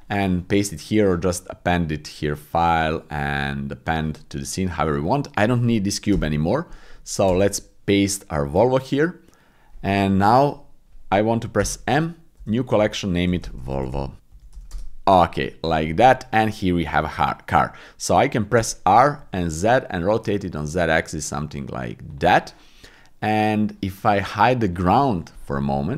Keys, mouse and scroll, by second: 1.8-4.0 drag, 5.0 click, 6.1 Delete, 8.8 ctrl+v, 11.6 m, 14.2 BackSpace, 18.6 r, 19.2 z, 24.7 click.